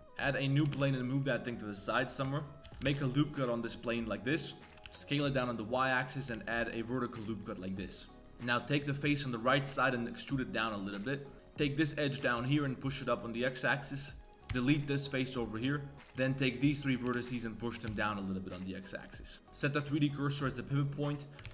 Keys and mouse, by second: 0.5 g, 1.9 KP_Decimal, 2.2 Tab, 2.6 ctrl+r, 2.7 ctrl+z, 2.9 ctrl+r, 4.5 click, 4.7 2, 4.7 a, 4.7 shift+s, 6.3 ctrl+r, 7.4 middle click, 7.9-8.3 middle drag, 8.3 3, 8.5 middle click, 8.8 middle click, 9.5 e, 11.3 g, 11.9 click, 12.2 g, 14.2 click, 14.2 2, 14.2 3, 14.5 x, 15.6 1, 15.9 1, 15.9 2, 16.3 shift+click, 16.7 shift+click, 17.0 g, 19.1 middle click, 19.3 click, 19.3 1, 21.1 click, 21.4 shift+s.